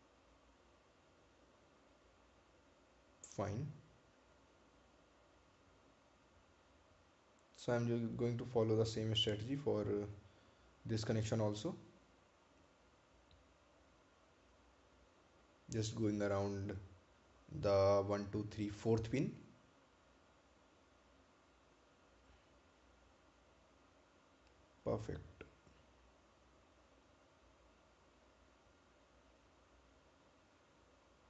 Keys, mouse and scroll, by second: 5.7-6.4 scroll down 1, 8.0 click, 14.6 scroll up 1, 21.9 click, 28.6 click.